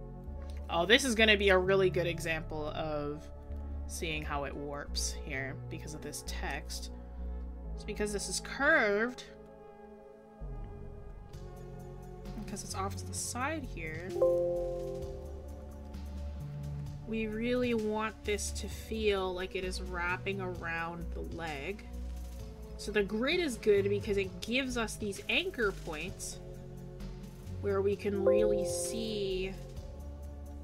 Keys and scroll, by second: 0.5 scroll up 1, 1.2 scroll.